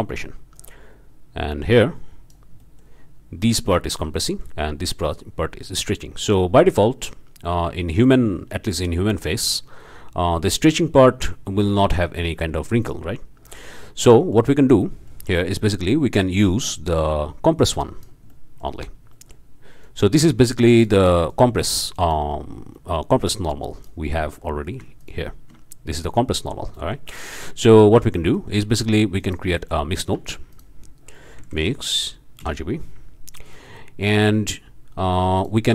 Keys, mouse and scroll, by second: 0.5-2.5 drag, 2.6-3.0 drag, 4.3-4.6 drag, 8.0-11.0 drag, 11.1 click, 13.7 click, 15.5-16.2 scroll up 2, 15.6 click, 17.0-18.2 drag, 18.3-18.8 drag, 18.8-19.1 scroll up 1, 19.1-19.5 drag, 19.8-21.2 drag, 22.4 middle click, 22.8 click, 23.3 click, 24.1 click, 25.0 ctrl+shift+drag, 26.4 click, 26.8-27.1 drag, 27.7-28.1 ctrl+shift+drag, 28.2-28.8 ctrl+shift+drag, 29.2 click, 29.6 click, 30.1 shift+a, 30.5 shift+click, 31.4 m, 31.5 i, 31.6 x, 32.1 ., 32.4 Return, 33.5 drag, 34.3 scroll up 2, 35.4 click.